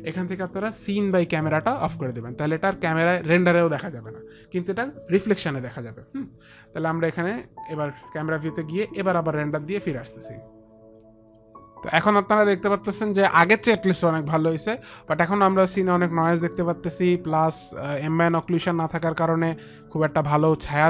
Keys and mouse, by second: 2.3 click, 7.5 click, 10.1 ctrl+r, 10.1 click, 11.2 F9.